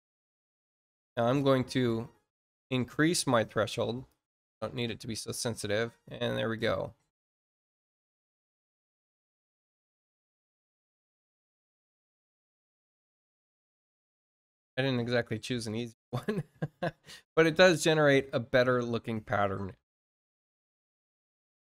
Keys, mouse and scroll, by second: 0.5 click, 1.1 click, 1.6 click, 2.3-4.0 drag, 4.3 click, 5.1 click, 6.5 click.